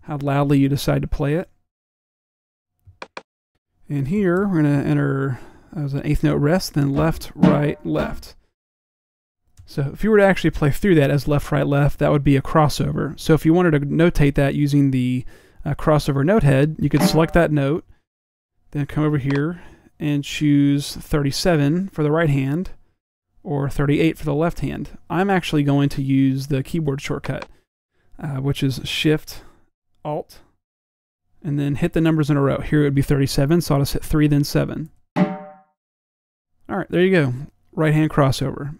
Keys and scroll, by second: 4.0-5.2 typing.